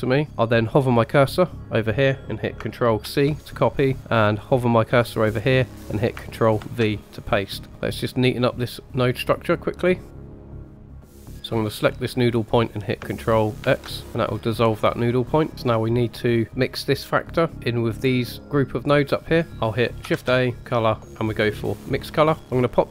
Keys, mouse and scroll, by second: 3.0 ctrl+c, 6.5 ctrl+v, 7.7 middle click, 7.7 scroll down 2, 9.4-10.6 drag, 10.7 click, 11.1-12.0 drag, 13.6 ctrl+x, 14.4-15.5 drag, 15.5 scroll down 2, 16.4-17.2 drag, 19.5 scroll up 1, 20.1 shift+a, 22.4 middle click, 22.4-22.9 scroll up 3.